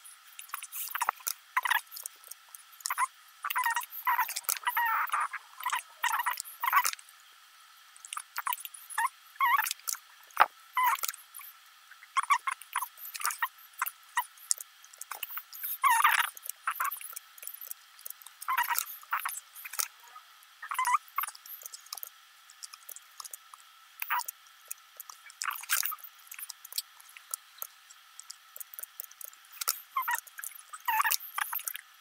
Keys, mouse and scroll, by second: 0.2 x, 0.5 scroll up 4, 0.6 middle click, 1.1 middle click, 1.5 click, 1.7 ctrl+r, 2.3 middle click, 2.5 g, 2.8 s, 3.0 middle click, 3.0 scroll down 1, 4.3 click, 4.6 click, 5.0 ctrl+r, 6.1 middle click, 7.0 click, 7.3 ctrl+r, 8.6 middle click, 8.9 scroll up 2, 9.1 scroll down 2, 9.1 middle click, 9.4 click, 10.4 ctrl+r, 11.0 click, 11.2 click, 11.5 ctrl+r, 13.0 click, 13.5 click, 13.7 ctrl+r, 14.7 middle click, 15.1 g, 15.4 middle click, 15.5 g, 15.7 middle click, 16.1 scroll up 2, 16.4 click, 16.6-18.6 typing, 16.8 click, 16.9 click, 17.1 click, 17.6 click, 17.8 click, 18.1 click, 18.3-18.8 scroll down 2, 18.5 click, 18.8 middle click, 19.0 click, 19.3 ctrl+r, 20.0 click, 20.3 ctrl+r, 21.3 click, 21.4 middle click, 21.9 click, 22.1-25.4 typing, 23.0 middle click, 23.2 click, 24.1 middle click, 25.1 click, 25.3 click, 25.6 middle click, 26.0 click, 26.2 ctrl+r, 26.8 middle click, 27.1 click, 27.2-29.3 typing, 27.5 right click, 28.7 middle click, 28.8 scroll up 3, 28.9 click, 29.2 click, 29.4 click, 29.7 click, 29.9 click, 30.2 ctrl+r, 30.7 s, 30.8 click, 30.9 g, 31.1 scroll down 2, 31.3 click, 31.6 ctrl+r.